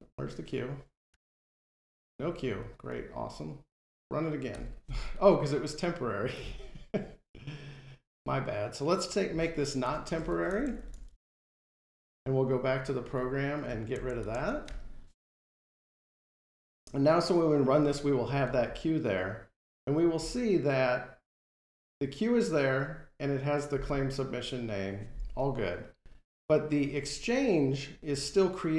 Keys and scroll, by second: 4.4 F5, 8.5 shift+F5, 11.8 Delete, 12.7 ctrl+Tab, 14.4 Delete, 15.2 F5.